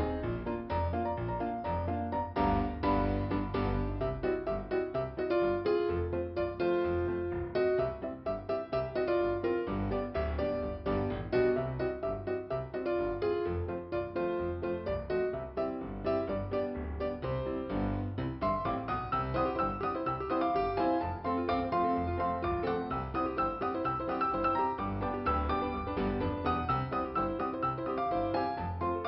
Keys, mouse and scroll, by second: 2.2 click, 3.0 click, 3.9 click, 4.4 scroll down 2, 5.4 p, 6.3 click, 7.1 click, 10.3 click, 10.3 ,, 11.0 click, 12.4 click, 12.9 click, 18.0-19.1 scroll up 2, 19.8 click, 20.6 scroll down 1, 26.6 middle click, 27.9 scroll up 2.